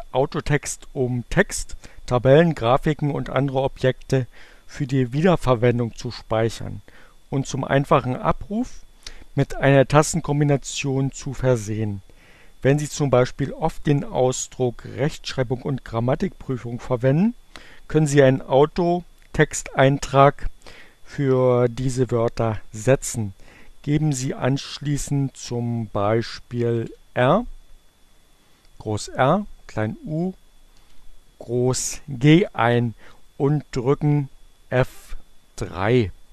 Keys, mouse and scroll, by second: 25.8 shift+r, 28.3 u, 28.6 shift+g, 36.0 F3.